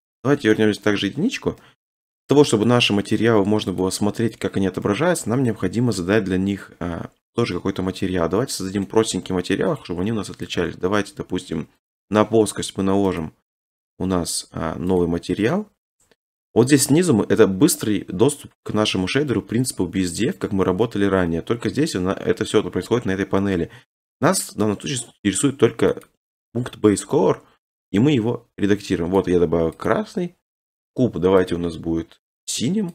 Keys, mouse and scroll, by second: 0.2 1, 0.8 1, 3.2 middle click, 3.8 click, 5.5 middle click, 8.2 middle click, 8.8 middle click, 9.8 click, 10.6 click, 13.2 click, 15.0 click, 16.8 middle click, 17.0 middle click, 17.1-18.4 scroll, 18.4-19.4 scroll, 19.4 scroll, 20.0-20.4 scroll, 20.7-21.4 scroll, 21.4 scroll, 22.0-22.5 scroll, 23.3-24.1 scroll, 26.0 click, 29.1 click, 29.9 click, 31.5 click.